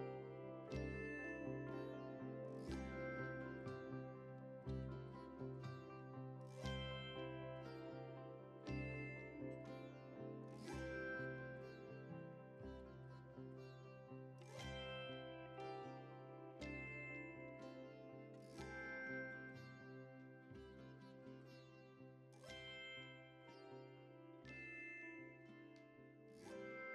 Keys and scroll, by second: 19.9 ctrl+c, 20.5 ctrl+v, 23.9 F11.